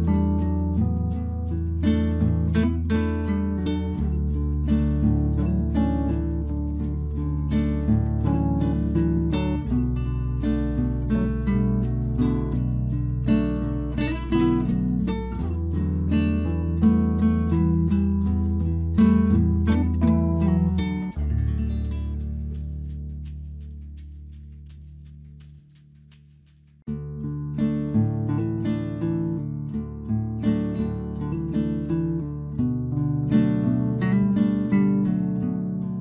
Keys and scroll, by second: 7.4 ctrl+t, 10.8 Return, 18.6 Return, 32.3 ctrl+t.